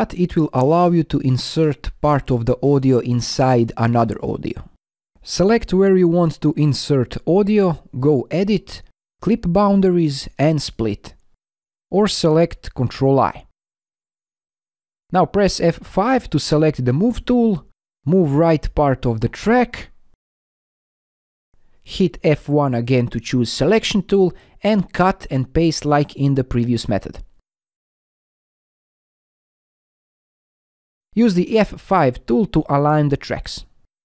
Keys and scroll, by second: 11.7 ctrl+i, 17.2 F5.